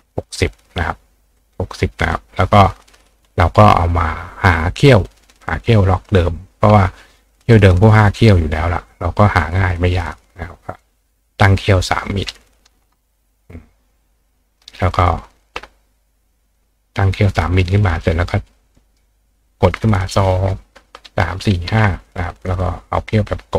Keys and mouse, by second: 1.4 click, 5.5 click, 7.4 click, 8.9-10.8 drag, 11.7 click, 14.3 click, 14.9 click, 16.4 click, 18.5-19.6 drag, 18.7 right click, 22.0 click.